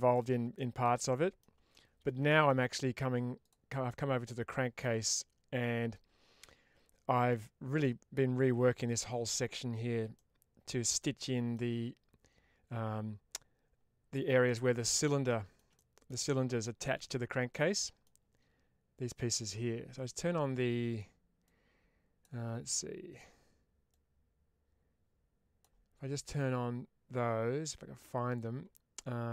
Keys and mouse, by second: 0.4 shift+middle drag, 1.0 middle click, 1.6-1.9 shift+middle drag, 2.1 middle click, 3.7-4.1 middle drag, 4.4 shift+middle drag, 5.0-7.2 middle drag, 10.1-10.8 middle drag, 11.1 shift+middle drag, 14.3-14.8 middle drag, 15.1-15.4 shift+middle drag, 15.6-15.9 middle drag, 17.4-17.9 middle drag, 21.4-25.5 drag.